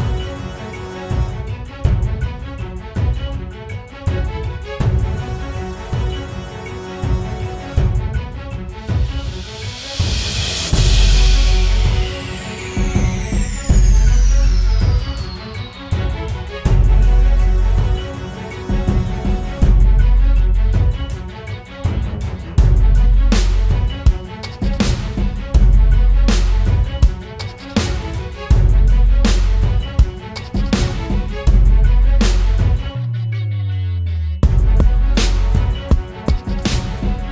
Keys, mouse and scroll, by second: 0.9-2.7 typing, 2.2 double click, 9.9 double click, 35.0 typing.